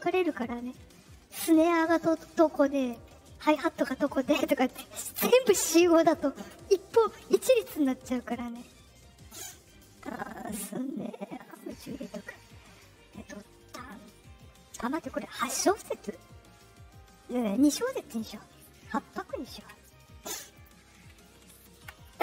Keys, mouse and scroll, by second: 9.6 click, 11.3 click, 20.5 click, 21.2 ctrl+click.